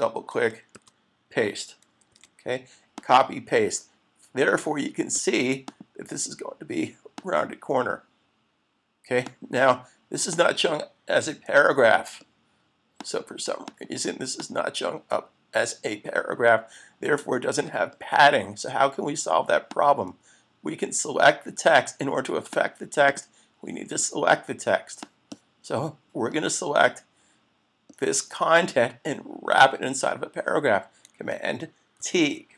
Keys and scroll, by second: 0.7 super+v, 2.3 super+s, 32.0 super+t.